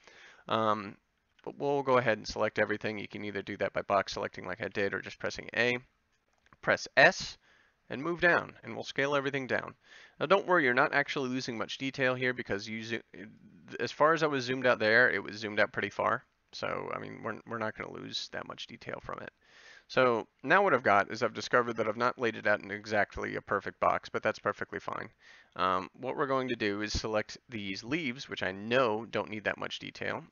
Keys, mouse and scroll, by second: 1.3 b, 4.0 a, 4.7 a, 7.2 s, 11.1 g, 12.6 s, 13.6 g, 22.8 a, 23.5 b, 25.6 b, 27.8 g, 29.3 s.